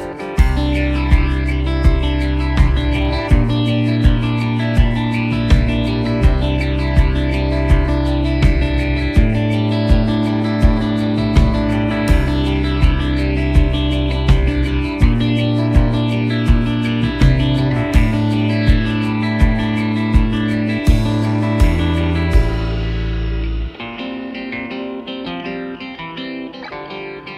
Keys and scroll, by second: 10.5 ctrl+z, 12.1 shift+a, 13.5 s, 14.6-19.2 typing, 25.1 g.